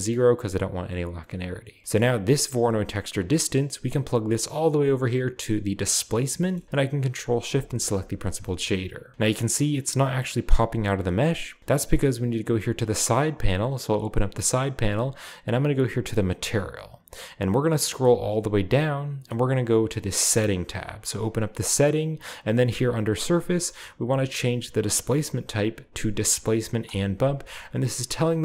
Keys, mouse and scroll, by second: 1.3-1.8 scroll down 1, 3.8-6.1 drag, 7.5 ctrl+shift+click, 7.9-8.4 shift+drag, 8.4-9.1 shift+middle drag, 12.1-14.9 drag, 16.3 click, 17.4-24.8 scroll down 1, 24.8 click, 26.8 click, 28.1-28.4 scroll down 1.